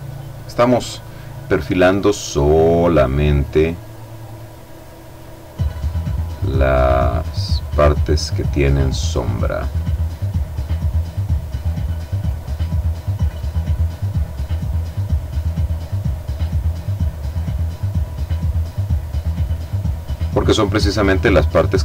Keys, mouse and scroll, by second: 1.2 click, 1.9 click, 3.7 click, 4.8-5.9 drag, 5.9 click, 7.4 click, 8.9 click, 9.9-11.7 drag, 11.9 click, 13.4 click, 15.3 click, 16.0 click, 16.8 click, 17.5-18.4 drag, 19.7 click, 20.7 click.